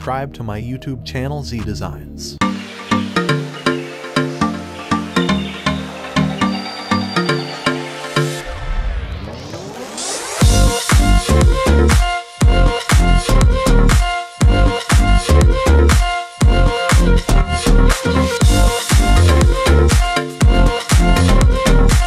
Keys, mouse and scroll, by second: 0.3 space, 1.1-2.1 drag, 10.7-11.9 drag.